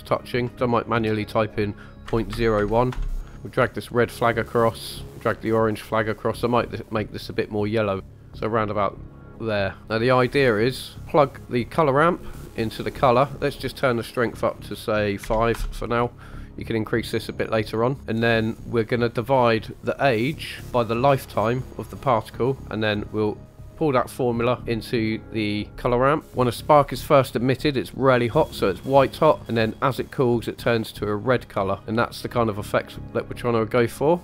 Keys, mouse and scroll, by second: 0.5 middle click, 0.5-1.2 scroll down 2, 3.3 middle click, 3.7-4.8 drag, 5.1-6.0 drag, 6.6 click, 7.3 click, 9.8 scroll down 3, 10.2-10.6 scroll down 2, 10.6 middle click, 11.7-12.7 drag, 13.3-15.5 drag, 17.4-18.4 middle drag, 18.6 scroll up 2, 19.8-20.6 drag, 20.8-21.7 drag, 22.6 middle click, 23.3-24.6 drag, 31.8-33.1 drag, 31.8 middle click.